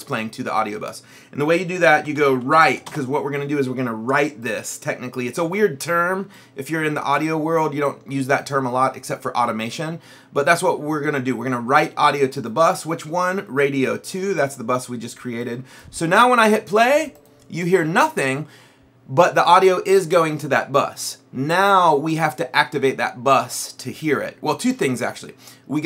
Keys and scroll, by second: 1.7-3.2 typing.